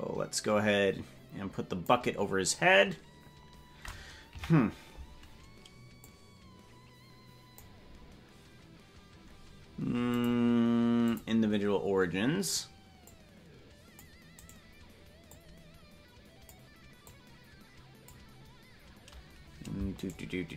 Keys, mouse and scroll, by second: 2.6-3.6 scroll down 1, 3.6-4.3 scroll down 4, 4.3 KP_Decimal, 6.0-7.6 drag, 10.1-11.2 drag, 13.0 click, 14.4 right click, 15.2-16.5 drag, 17.0-18.1 drag, 20.0 shift+right click.